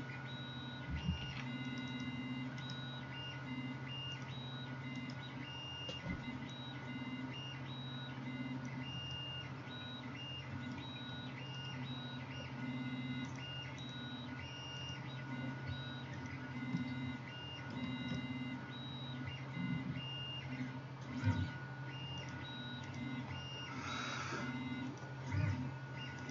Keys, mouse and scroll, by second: 1.3 ctrl+r, 2.6 right click, 2.8-4.2 middle drag, 4.2-22.3 drag, 5.0 middle click, 5.0 right click, 23.0-26.3 drag.